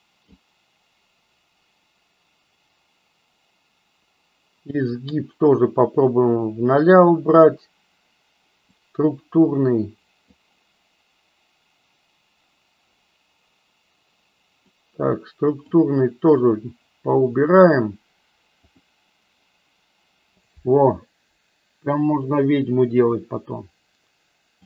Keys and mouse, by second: 5.2-6.2 drag, 8.8-10.3 drag, 14.6-15.6 drag, 18.8 click, 23.3-24.6 drag.